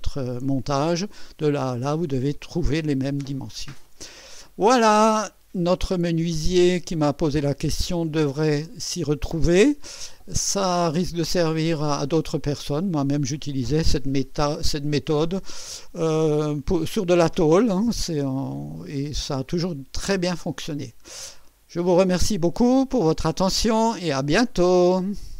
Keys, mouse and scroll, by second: 2.9-4.1 middle drag, 24.0 right click.